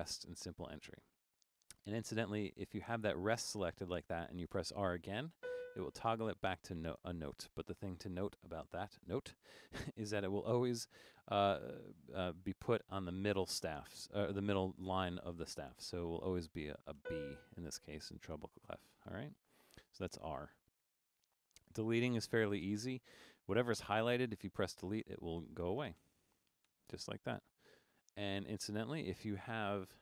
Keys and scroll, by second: 5.4 r, 16.3-17.0 typing, 18.8 r, 24.0-26.0 typing, 27.4 BackSpace, 28.4 Down, 29.7 Left.